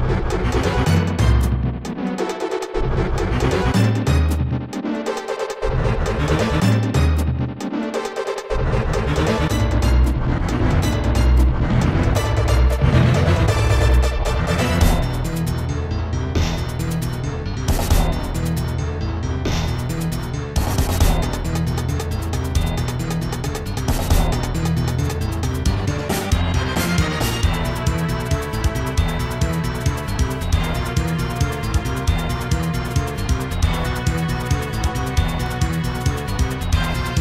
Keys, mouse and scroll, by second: 0.0-0.6 typing, 2.3 Return, 3.9 ctrl+z, 4.7 s, 5.4 scroll up 2, 8.9 click, 11.8 ctrl+z, 14.7 s, 15.1 shift+z, 20.1 ctrl+z, 21.2 scroll up 2, 21.7 s, 24.4 click, 24.6 ctrl+z, 25.2 s, 27.4 click, 27.8 ctrl+z, 34.4 click, 34.8 ctrl+z, 35.5 scroll down 2, 36.0 middle click, 37.1 scroll up 1.